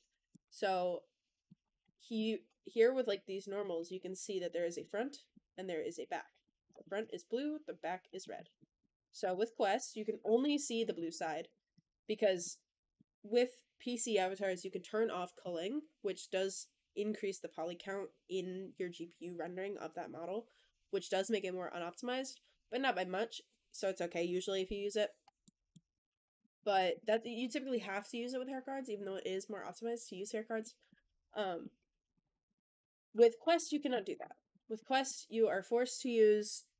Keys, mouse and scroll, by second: 0.1 scroll up 1, 0.2-1.3 middle drag, 1.3 scroll down 1, 1.5 click, 1.7-2.3 scroll up 3, 1.7-2.0 middle drag, 2.6 click, 3.0-3.4 middle drag, 3.0-3.4 scroll down 1, 3.6 click, 4.3 click, 4.7-5.2 middle drag, 5.8 click, 6.1 click, 6.3 middle drag, 6.7 shift+middle click, 7.0 scroll down 1, 7.2-8.0 middle drag, 8.1 shift+middle drag, 8.4 middle drag, 9.1 Tab, 9.3 click, 10.0 ctrl+l, 10.3 c, 11.0 x, 11.9 click, 12.1 Tab, 12.3-12.8 middle drag, 25.3 middle drag, 25.8 click, 26.0 Tab, 26.3 middle click, 26.6 shift+middle click, 26.9 Tab, 30.5 middle click, 31.3 middle drag, 31.7 scroll up 2, 31.9 click, 32.1 Tab, 32.3 click, 33.0 ctrl+l, 33.4 alt+n, 34.0 Tab, 34.3 click, 34.6 middle drag.